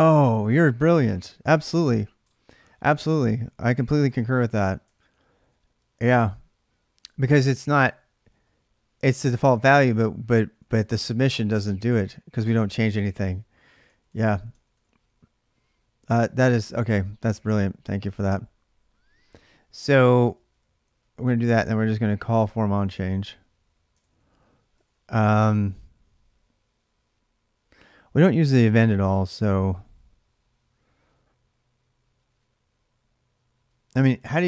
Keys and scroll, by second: 1.2 alt+Tab, 3.2 ctrl+a, 3.5 ctrl+a, 4.7 ctrl+[, 4.7 ctrl+j, 7.0 j, 7.6 j, 8.7-14.3 typing, 17.1 j, 17.4 j, 17.5 j, 19.8 k, 19.9 k, 20.6 j, 20.8 j, 22.7 o, 23.8 ctrl+[, 23.8 ctrl+j, 23.9-25.2 typing, 29.1-30.1 typing.